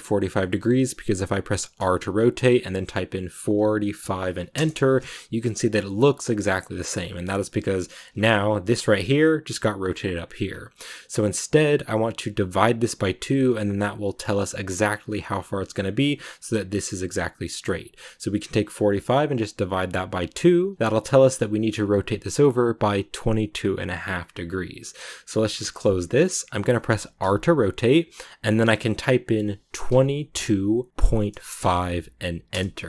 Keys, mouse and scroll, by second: 8.0 ctrl+z, 25.4 shift+middle click, 26.0 scroll down 1, 26.3 scroll up 2, 27.1 r.